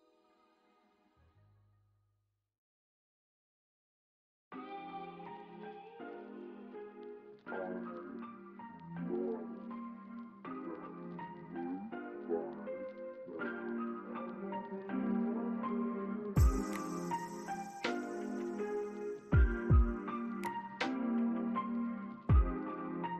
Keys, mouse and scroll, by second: 2.2 alt+click, 4.4 double click, 4.6 scroll down 1, 5.1 middle click, 5.7 scroll down 1, 6.0 scroll up 1, 7.1 scroll up 1, 7.4 alt+middle click, 7.9 alt+scroll down 1, 8.6 alt+middle click, 11.6 alt+click, 12.3 alt+middle click, 15.0 alt+click, 16.5 right click, 22.6 BackSpace.